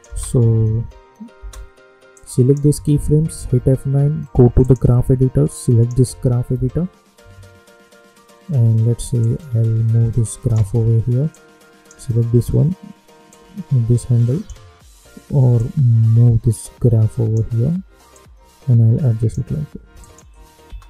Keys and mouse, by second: 0.0 space, 2.2 click, 3.3 F9, 4.6 click, 6.5 =, 9.1-11.2 drag, 11.2-18.1 drag, 18.1-20.0 drag, 20.3 space.